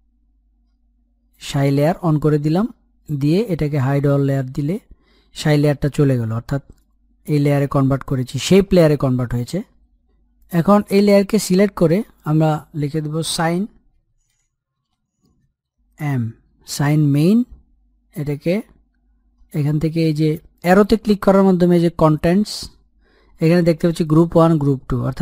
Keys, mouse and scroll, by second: 4.0 click, 8.4 click, 10.6 click, 11.4 Return, 13.9-15.8 typing, 16.6 Return, 17.6 click, 20.3 click.